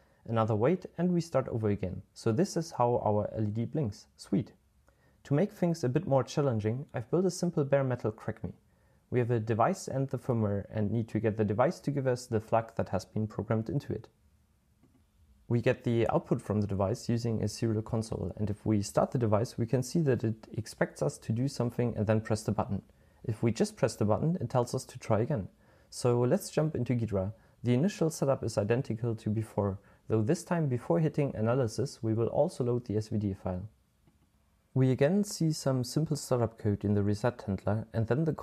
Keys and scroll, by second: 25.5-27.0 typing, 28.0-30.8 typing, 34.2 typing.